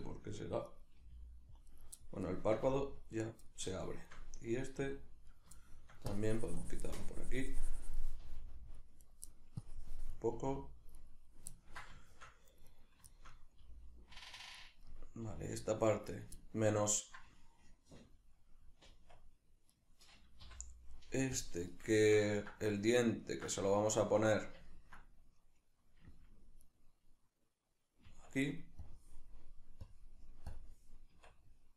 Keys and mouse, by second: 0.8 right click, 1.0 g, 1.8 right click, 2.0-3.2 shift+middle drag, 2.6 g, 3.2 right click, 3.5 shift+middle click, 4.4 right click, 4.8 g, 5.4 right click, 5.6 shift+middle click, 6.1-9.1 drag, 8.2 g, 9.1 right click, 9.3 middle click, 9.6-11.1 drag, 10.3 g, 11.1 right click, 11.6-12.7 ctrl+middle drag, 12.7 right click, 13.1-14.7 shift+middle drag, 13.6 g, 14.7 right click, 14.9-16.2 middle drag, 15.3 g, 16.2 right click, 16.4-19.7 ctrl+middle drag, 18.9 Tab, 19.7 right click, 20.5 l, 21.4 click, 22.0-26.7 shift+middle drag, 26.1 Tab, 26.7 right click, 28.1 Tab, 28.8-30.7 drag, 31.1 Tab.